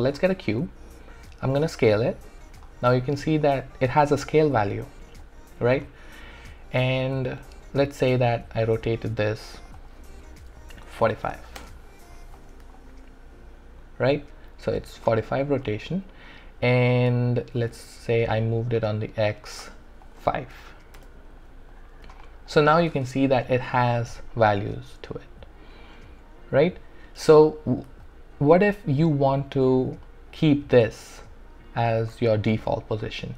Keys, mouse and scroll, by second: 0.0 shift+right click, 1.5 r, 1.9-5.2 drag, 5.2 alt+click, 5.8 alt+right click, 6.3-7.9 alt+drag, 7.9 e, 8.6 click, 11.0 typing, 11.6 Return, 12.3-15.6 drag, 17.3 alt+click, 17.7 w, 18.5 click, 20.5 5, 21.0 Return, 21.7 click, 22.2 alt+right click, 22.5 alt+click, 27.9 click, 28.0-32.4 alt+drag, 32.4-33.3 alt+drag.